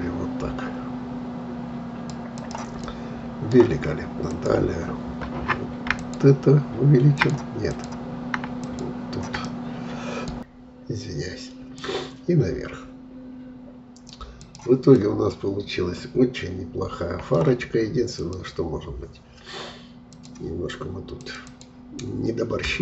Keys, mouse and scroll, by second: 2.4 click, 2.8-4.3 middle drag, 4.3-9.5 drag, 9.5-11.2 middle drag, 11.7-14.9 drag, 14.9-18.0 middle drag, 18.1-22.8 drag.